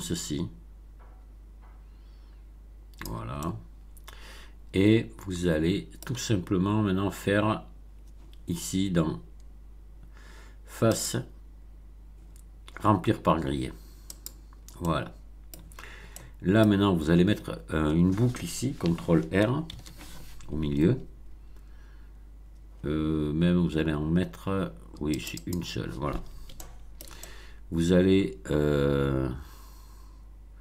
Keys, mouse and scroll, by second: 3.3-6.2 middle drag, 10.9 click, 14.0 click, 14.7-15.6 middle drag, 15.8 scroll up 1, 16.1-16.7 middle drag, 16.7 scroll down 1, 19.6 ctrl+r, 25.1 click, 26.5-30.6 shift+middle drag.